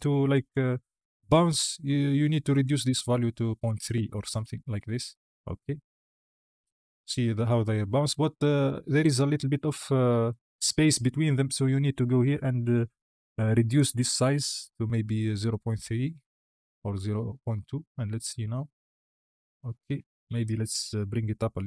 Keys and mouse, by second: 5.0 click, 5.2 space, 7.8 space, 13.6-16.7 shift+drag, 17.5 click, 18.1 space, 20.3-21.6 shift+middle drag.